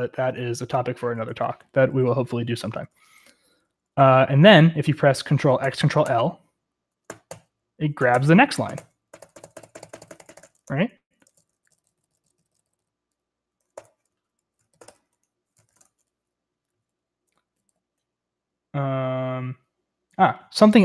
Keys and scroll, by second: 2.8 ctrl+p, 2.9 ctrl+p, 3.0 ctrl+p, 3.2 ctrl+p, 3.3 ctrl+p, 3.6 ctrl+p, 5.6 ctrl+x, 6.1 ctrl+l, 7.1 ctrl+x, 7.3 ctrl+l, 8.0 ctrl+x, 8.1 ctrl+l, 8.7 ctrl+x, 8.8 ctrl+l, 9.1 ctrl+x, 9.2 ctrl+l, 9.4 ctrl+x, 9.4 ctrl+l, 10.2 ctrl+x, 10.3 ctrl+l, 10.9 ctrl+l, 11.0 ctrl+x, 11.1 Escape, 11.2-15.9 typing, 17.4-18.1 typing.